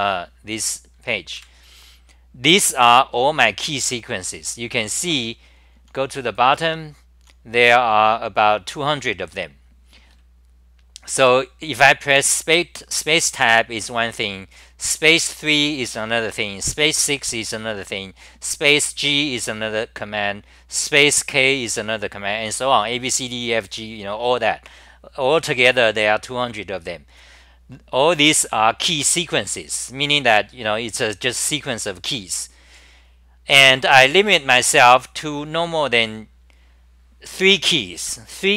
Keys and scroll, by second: 1.4 super+=, 4.2-4.8 scroll down 11, 5.5-8.0 typing, 10.1-10.8 d, 25.4-26.7 scroll down 7, 26.7-28.0 scroll down 9, 28.9-33.0 scroll down 29.